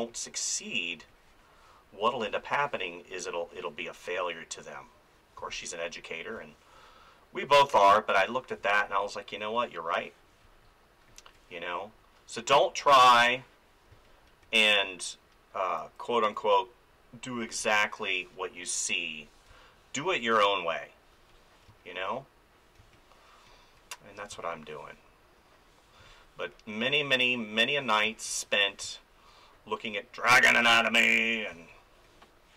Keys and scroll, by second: 2.2 space, 5.4 space, 8.5 space, 13.9 space, 14.4 ctrl+z, 17.6 space, 19.5 space, 21.7 space, 26.0 space, 28.0 space, 31.5 space.